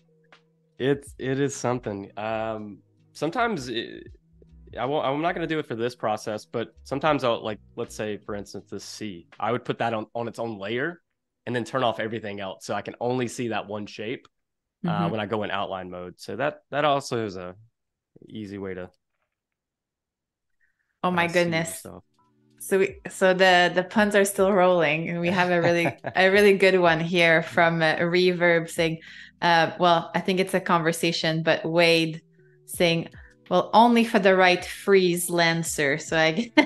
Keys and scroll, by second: 3.3 space, 4.5 super+-, 5.5 super+-, 6.1 super+=, 6.5 space, 16.3 space, 17.5 super+y, 18.8 z, 20.0 a, 23.3 super+-, 24.0 space, 25.2 super+=, 26.2 super+-, 27.6 super+y, 30.1 shift+m, 31.1 a, 33.5 shift+m, 34.6 a, 36.3 super+c.